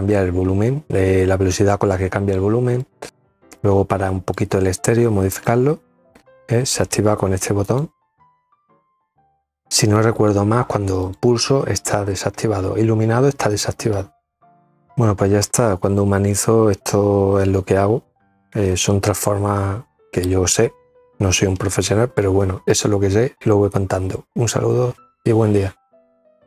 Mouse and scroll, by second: 1.5-3.0 drag, 3.4 click, 5.4 click, 6.3 click, 6.6 click, 6.9 click, 7.1 click, 7.4 click, 7.7 click, 8.7 click, 9.6 click.